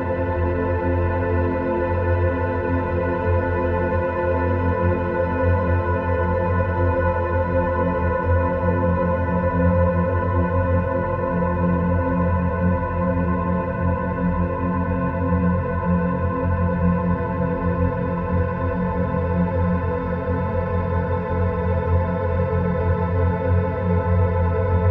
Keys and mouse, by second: 0.3 3, 0.5 click, 2.2 e, 3.3-7.8 drag, 13.4 e, 14.8-16.5 drag, 18.7 3, 18.9 click, 20.7 e, 21.9-24.6 drag.